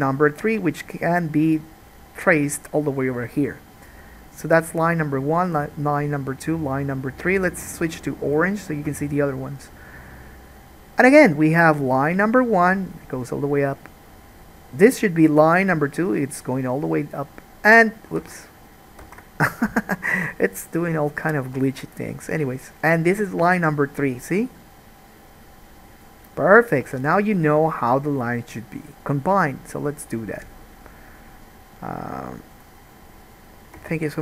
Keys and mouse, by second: 7.4-11.7 right drag, 11.7-18.3 middle drag, 18.4 ctrl+z, 19.4 ctrl+z, 19.7 Escape, 19.7-23.5 middle drag, 34.0 Tab.